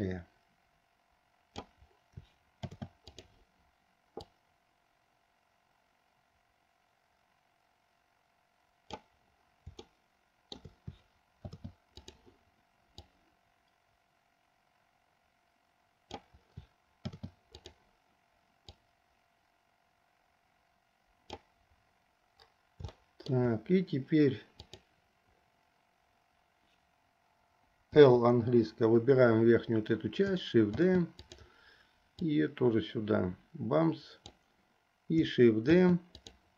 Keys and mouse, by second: 2.7 shift+d, 4.2-9.1 drag, 10.0 shift+middle click, 11.5 shift+d, 13.2-16.2 drag, 17.1 shift+d, 19.0-21.5 drag, 23.1 shift+middle click, 24.6 click, 28.1 l, 30.8 shift+d, 32.3-34.4 drag, 35.8 shift+d.